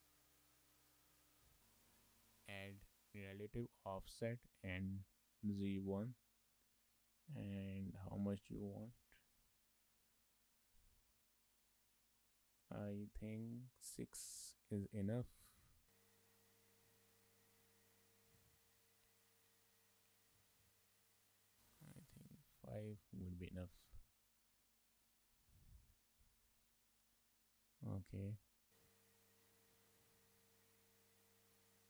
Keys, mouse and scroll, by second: 0.2 Tab, 7.5 click, 8.2 click, 9.7 click, 9.7 shift+middle click, 14.0 shift+middle click, 15.5-16.4 scroll up 6, 16.7-17.5 scroll down 5, 17.0 shift+middle click, 17.5 shift+middle click, 18.5 shift+middle click, 19.6 click, 20.2 scroll down 1, 20.3 shift+middle click, 20.9-21.9 scroll up 1, 21.9 click, 22.2 click, 23.1 shift+middle click, 26.5 scroll down 2, 26.7 middle click, 29.3 scroll up 2, 29.6 middle click, 29.7 middle click, 30.7 shift+middle click, 30.8 middle click, 31.7 click.